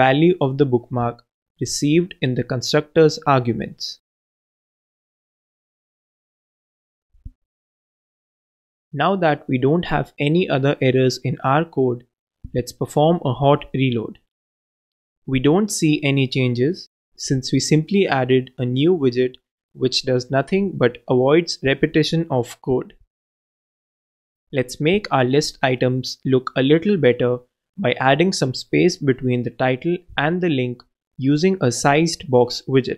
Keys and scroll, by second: 3.8 super+c, 5.0-5.8 typing, 8.4 ctrl+alt+Return, 9.1 ctrl+Return, 11.9 super+c, 13.0 shift+super+v, 14.4 shift+super+v, 15.4 super+s, 29.5-30.4 typing, 32.0-32.8 typing.